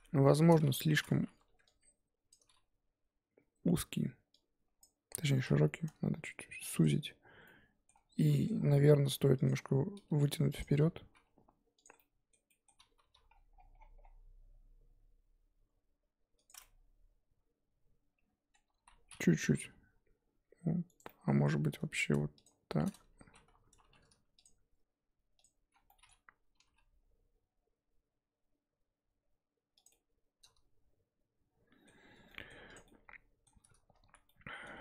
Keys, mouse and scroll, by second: 1.4 1, 2.3 click, 4.8 click, 5.3 s, 7.3 z, 7.4 middle click, 8.2 scroll down 2, 8.2 middle click, 8.8 3, 9.5 click, 10.6 click, 11.9-13.0 middle drag, 13.0 g, 16.6-18.7 middle drag, 18.7 ctrl+z, 19.5 g, 21.0-22.4 middle drag, 22.4 alt+shift+click, 23.2 ctrl+z, 23.8 2, 24.4 alt+shift+click, 25.4 alt+shift+click, 25.9 middle click, 26.6 g, 29.9-32.1 middle drag, 32.1 Tab, 32.3 middle click, 32.7 click, 32.8 middle click, 33.6-34.1 scroll up 3, 34.1 Tab, 34.2 middle click, 34.6 Tab.